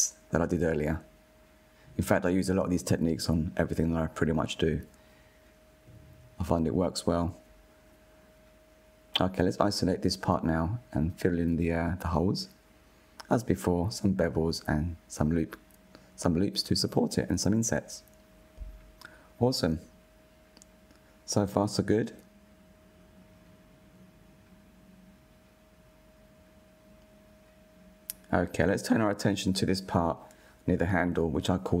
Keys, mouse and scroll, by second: 0.8 alt+click, 1.3 g, 2.0 Tab, 2.2 scroll down 4, 2.5 click, 2.7-4.9 middle drag, 4.9 /, 6.2-8.8 middle drag, 8.8 click, 10.0 /, 11.0 Tab, 11.7 2, 12.1 alt+click, 12.7 f, 12.9 alt+click, 13.0 middle click, 13.4 f, 13.5 middle click, 13.8 alt+shift+click, 14.0 scroll up 1, 14.2 ctrl+b, 15.4 middle click, 15.7 ctrl+r, 16.1 s, 17.0 click, 17.2 middle click, 17.6 click, 17.8 middle click, 17.9 shift+click, 18.1-18.5 middle drag, 19.5 click, 19.8 Tab, 20.1 click, 20.4-20.8 scroll down 1, 20.8-22.0 middle drag, 22.0-22.6 scroll up 1, 22.6 /, 23.6 scroll down 3, 24.1-25.8 middle drag, 25.8 KP_1, 26.9-29.5 shift+middle drag, 29.5-30.1 scroll up 3, 30.1-31.8 shift+middle drag.